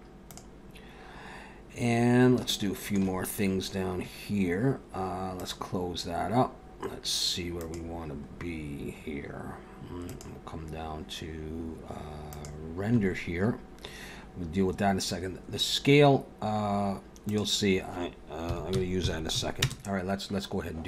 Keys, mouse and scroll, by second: 0.2 click, 1.9 scroll down 1, 2.5 shift+middle click, 5.3 click, 7.5 click, 8.3-8.7 scroll down 4, 10.1 click, 12.3 click, 13.7 scroll down 1, 17.3 click.